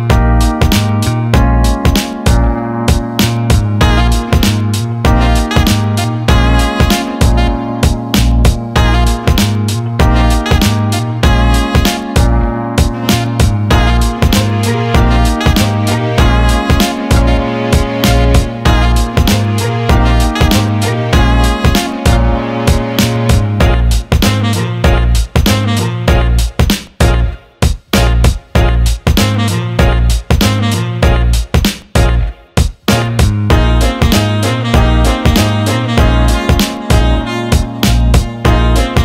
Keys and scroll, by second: 19.2 Escape, 33.3 ctrl+z.